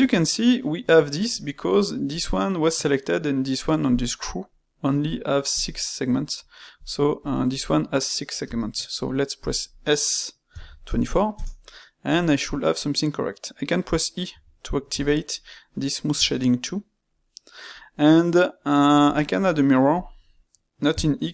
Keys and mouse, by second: 2.1 click, 6.7 click, 7.1 click, 7.9 middle click, 8.4 space, 17.4-21.2 middle drag.